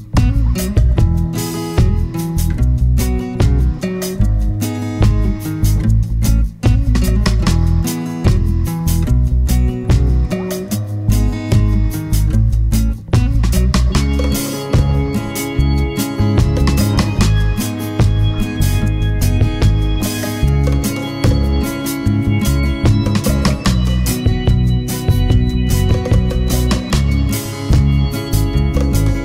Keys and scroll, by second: 4.9 super+d.